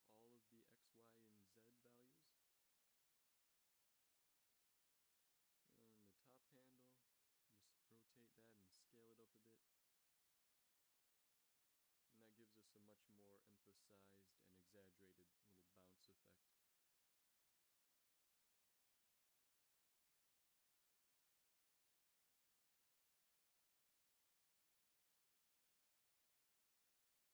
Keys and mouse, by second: 2.7 r, 6.1 a, 6.3 b, 8.3 r, 9.8 s, 13.1 a, 13.8-15.1 middle drag, 17.1-18.1 drag, 18.8 alt+a, 19.6 alt+a, 20.5 alt+a, 21.3 alt+a, 22.1-23.2 middle drag, 23.3 ctrl+s.